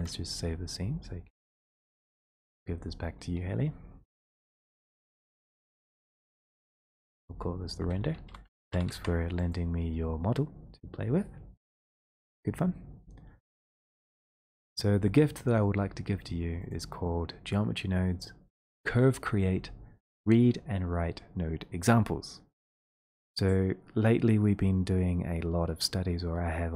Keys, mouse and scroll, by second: 0.1-6.1 drag, 4.3 ctrl+shift+s, 8.0-8.9 typing, 9.5 click, 14.4 click, 22.6 click, 23.3-26.7 drag.